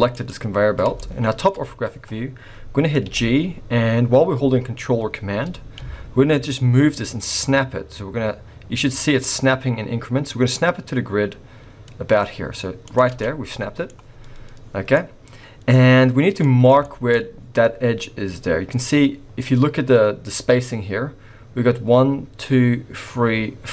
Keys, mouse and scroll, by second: 0.5-0.9 scroll up 1, 1.0 shift+middle click, 1.5-2.5 scroll up 1, 3.1 g, 13.2 middle click, 14.6-15.0 scroll down 3, 14.9 middle click, 16.4 middle click, 16.8 shift+middle click, 17.2-17.7 scroll up 3, 17.7-19.1 scroll up 1, 19.1-19.5 scroll down 2.